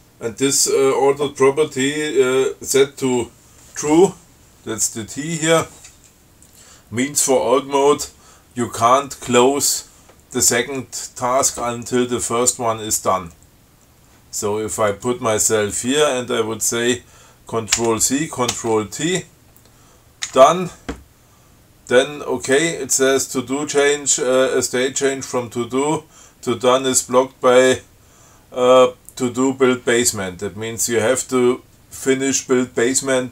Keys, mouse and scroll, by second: 15.2 click, 18.1 ctrl+c, 18.8 ctrl+t, 20.6 d.